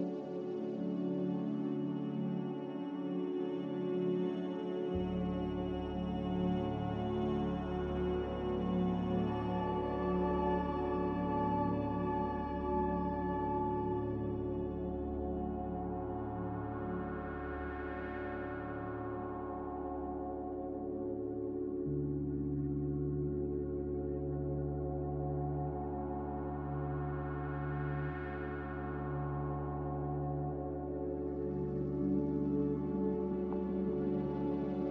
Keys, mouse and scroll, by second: 2.3-3.1 typing, 9.0-9.7 typing, 12.9-13.6 typing, 17.1-17.8 typing, 20.0 b, 21.6 Delete, 24.3 Delete, 26.7 Delete, 28.2 ctrl+z, 30.1 Delete, 31.5 z, 32.6 Delete.